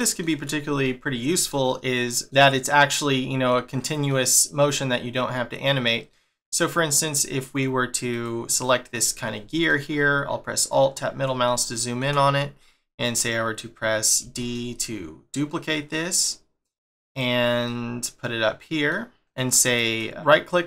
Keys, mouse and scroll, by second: 0.8 shift+middle click, 3.2 middle click, 4.1 middle click, 8.1 click, 8.6 middle click, 10.6 scroll down 1, 11.5 shift+middle click, 17.6 middle click, 19.0 scroll up 2, 19.3 middle click, 19.8 right click.